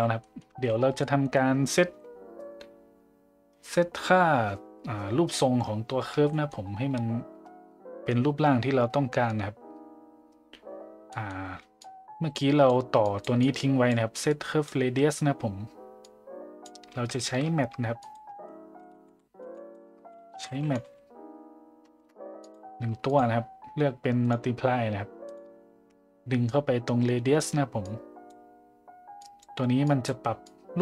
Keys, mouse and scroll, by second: 0.2 middle drag, 0.5 a, 1.0 middle drag, 6.3 middle drag, 11.2 middle click, 11.8-12.7 drag, 13.1 click, 13.4 click, 14.3 click, 16.1-16.7 drag, 17.2 shift+a, 24.2-25.4 drag, 26.5-27.4 drag, 27.8 click, 29.2 click, 29.9 click, 30.4-30.8 drag.